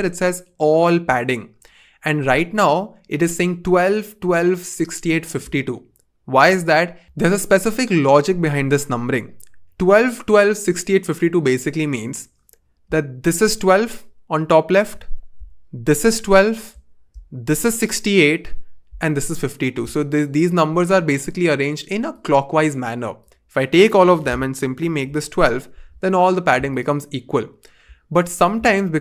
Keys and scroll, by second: 24.6-25.5 typing.